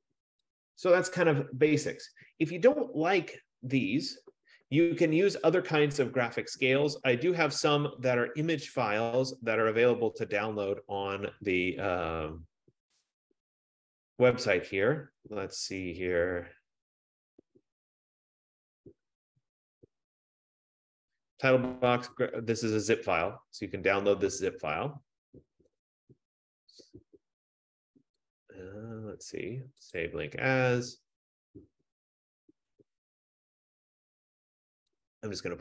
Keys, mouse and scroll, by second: 0.0 click, 0.9 click, 11.4-15.7 drag, 22.8-25.7 drag, 28.5 right click, 30.2 click, 35.2 click.